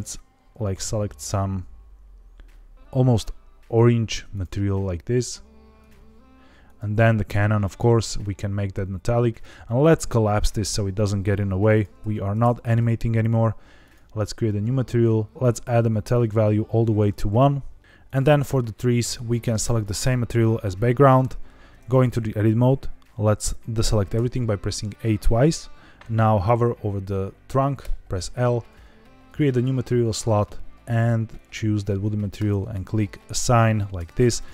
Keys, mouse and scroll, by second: 4.2 click, 5.1 click, 6.6 click, 7.0 middle click, 9.3-11.8 drag, 12.1 ctrl+Tab, 13.1 scroll up 1, 13.7 click, 15.3 click, 15.8 click, 18.0 click, 18.9 click, 21.7 Tab, 24.1 a, 24.2 a, 27.7 l, 29.2 click, 30.2-31.4 drag, 32.3 click, 33.9 Tab, 34.3 click.